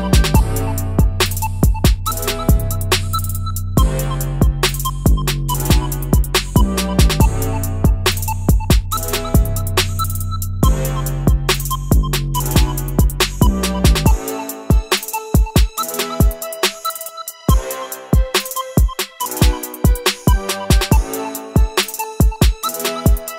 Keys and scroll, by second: 5.2 ctrl+z, 20.6-21.3 ctrl+z, 21.4 ctrl+z, 21.5 ctrl+z.